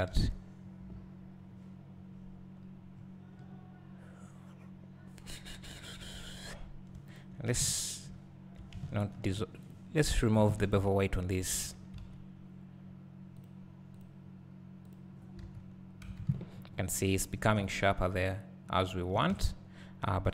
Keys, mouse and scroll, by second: 0.2 2, 2.1-2.6 scroll up 2, 2.6-3.4 scroll down 2, 3.4-4.1 scroll up 2, 4.1-7.2 scroll up 1, 7.2 alt+click, 9.7 ctrl+e, 10.4 click, 11.0 ctrl+e, 11.7 Tab, 13.4 click, 14.0 click, 15.7 scroll down 2, 16.6 scroll up 1, 17.4 scroll down 1, 17.6 `, 19.9 scroll up 1.